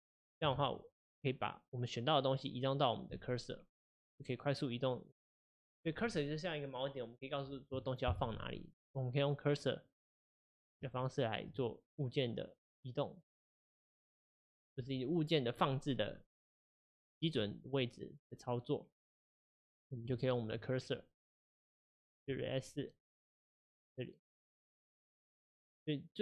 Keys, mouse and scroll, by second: 0.6 shift+s, 10.9-11.9 shift+right drag, 11.9 click, 17.5-19.1 middle drag, 19.1-19.8 right drag, 19.8 click, 22.3 shift+s.